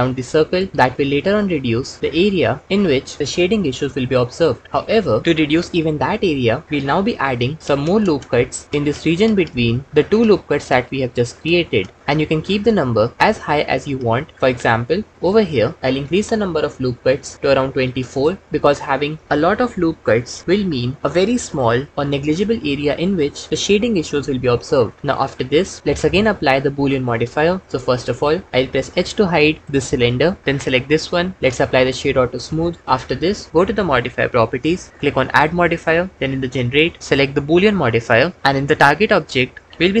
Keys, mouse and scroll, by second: 7.0 ctrl+r, 15.2-18.4 drag, 27.6 Tab, 29.7 h, 31.4-32.7 drag, 35.1-37.8 drag, 39.6-40.0 drag.